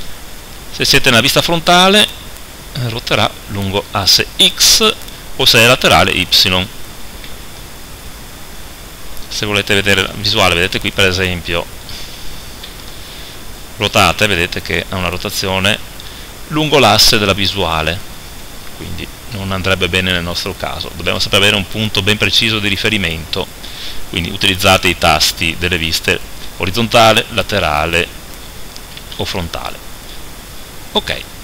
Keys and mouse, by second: 0.7 KP_1, 1.5 click, 1.9 r, 6.4 click, 7.3 KP_7, 10.7 KP_0, 12.7 KP_5, 14.1 r, 17.8-21.8 middle drag, 19.4 KP_7, 21.8 KP_7, 22.4 KP_1, 28.9 KP_1, 29.2 KP_3.